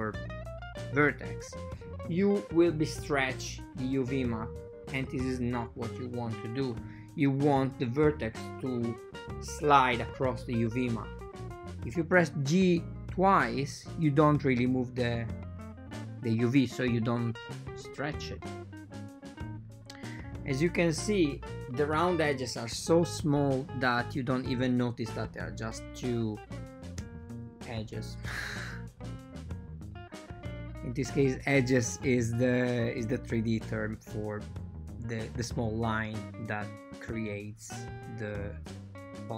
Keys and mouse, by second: 0.5 g, 1.2 right click, 4.8-5.8 drag, 9.0 click, 9.4-10.5 drag, 11.7 Escape, 11.7 g, 14.7 ctrl+middle click, 15.5 ctrl+middle click, 15.9 right click, 16.3 g, 17.2 right click, 17.4 g, 18.6 right click, 19.2 g, 20.3 right click, 21.0 g, 21.2 right click, 23.2 shift+a, 24.6 right click, 24.9 g, 26.0 click, 26.6 g, 26.8 click, 27.3 g, 27.6 click, 28.6 g, 28.9 click, 29.7 g, 31.0 ctrl+middle click, 31.5 ctrl+middle click, 33.7 click, 35.0 click, 35.5 n, 35.6 n, 36.3 click, 37.4 right click, 37.7 g, 38.5 right click.